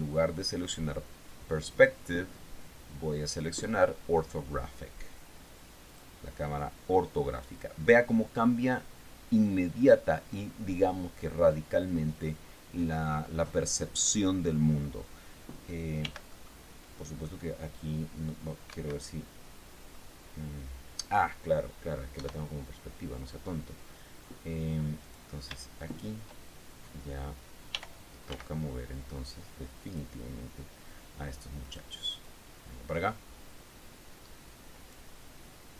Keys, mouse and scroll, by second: 6.2 click, 16.4 g, 16.7 click, 19.1 Escape, 19.8 scroll down 1, 20.3-21.5 drag, 22.5 KP_0, 24.6-25.0 scroll up 2, 25.4 right click, 26.2 shift+right click, 28.1 g, 28.6 x, 30.2 click, 32.0 right click, 32.6-35.4 drag.